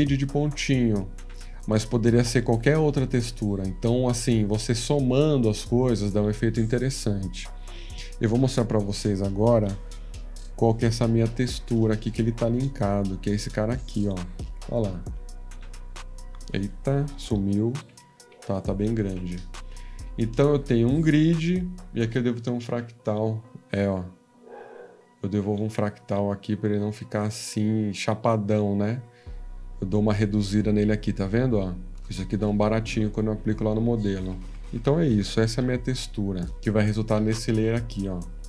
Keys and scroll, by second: 8.9 F13, 17.9 ctrl+=, 18.3 ctrl+=, 23.7 F14.